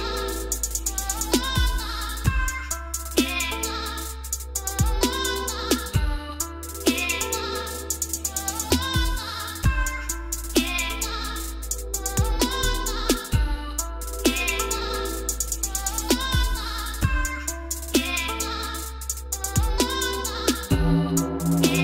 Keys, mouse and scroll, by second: 0.7 click, 1.5 s, 2.9-4.0 drag, 4.7-5.2 typing, 5.2 Return, 6.8 typing, 8.3 click, 8.6 scroll, 10.7 click, 13.2-13.8 scroll up 10, 14.4 c, 14.7 scroll, 15.7 click, 18.2 4, 18.4 Return, 19.9-20.4 scroll down 7, 20.7 scroll up 6.